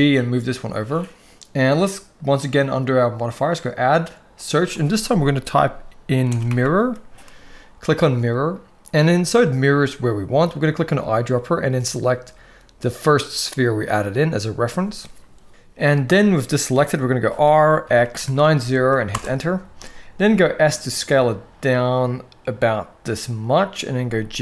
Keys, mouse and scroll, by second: 3.1-8.0 drag, 17.0 r, 19.9 s, 23.7 g.